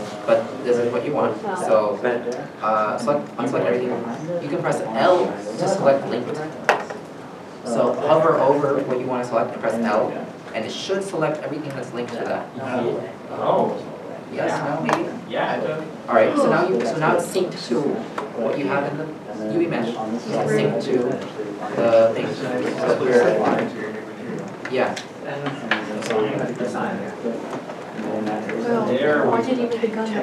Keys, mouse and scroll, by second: 2.9 alt+a, 22.2 middle click, 24.1 l, 24.8 alt+a, 26.1 l, 26.8 alt+a, 27.4 middle click.